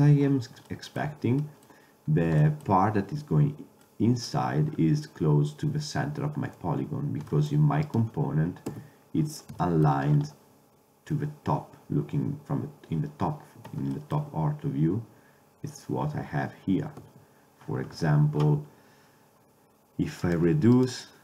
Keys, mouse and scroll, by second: 0.8-2.6 middle drag, 2.6-4.0 middle drag, 4.8-5.6 middle drag, 5.8-6.7 middle drag, 8.8 KP_7, 14.1-15.9 middle drag, 17.1 Tab, 20.3 right click, 20.5-21.2 drag.